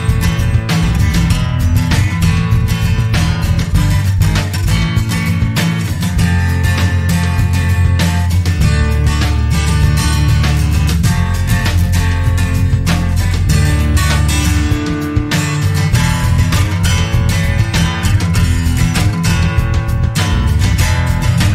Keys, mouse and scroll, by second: 0.4-0.8 scroll up 2, 1.9 click, 2.7 scroll down 1, 3.4 scroll up 1, 4.5-5.9 scroll down 8, 6.1 click, 8.0 click, 8.5-9.1 scroll down 2, 9.4 click, 10.6 click, 11.0 right click, 12.1 click, 13.3 click, 14.2 click, 16.3 click, 17.9 click, 19.1 click, 21.1 7, 21.4 0.